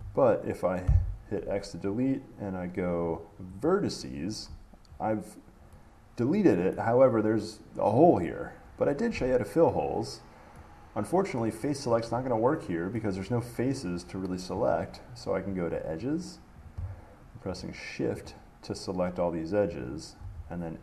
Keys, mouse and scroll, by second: 0.0 ctrl+z, 3.9 click, 5.1-5.9 scroll up 3, 7.0 middle click, 11.3 middle click, 13.2 middle click, 15.8 click, 16.9 click, 17.8 shift+click, 18.5 click, 20.1 shift+click.